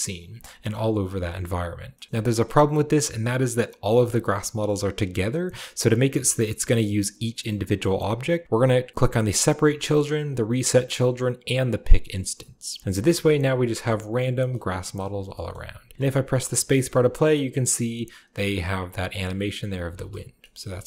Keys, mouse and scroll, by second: 0.1-0.5 scroll up 1, 0.3-2.1 shift+drag, 2.1-3.9 middle drag, 2.1-3.9 scroll up 1, 5.5-6.0 scroll down 1, 6.0-7.7 scroll up 1, 7.7-9.0 middle drag, 8.0-9.0 scroll up 1, 9.0 scroll up 1, 9.3-12.8 drag, 10.7-12.9 middle drag, 12.3-13.1 scroll down 1, 13.1-13.5 shift+middle drag, 13.1-14.2 shift+scroll up 1, 13.7-14.4 shift+middle drag, 14.2-14.9 shift+scroll down 1, 14.9-15.2 shift+middle drag, 15.1-16.5 shift+scroll down 4, 15.4-16.5 shift+middle drag, 16.5 shift+space, 16.6-18.7 shift+scroll up 2, 16.8-18.7 shift+middle drag, 18.7 scroll down 2, 19.8-20.8 scroll down 1, 19.8 space, 20.5 middle click.